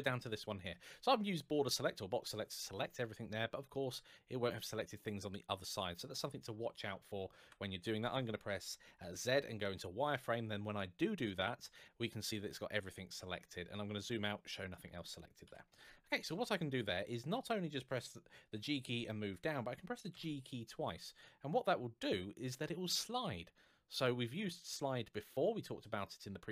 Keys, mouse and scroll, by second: 1.0 click, 3.5 middle click, 7.2 KP_1, 8.8 z, 9.4 click, 13.2-13.8 scroll down 1, 14.6-15.2 scroll up 1, 15.2 KP_1, 16.1 scroll up 1, 18.3 g.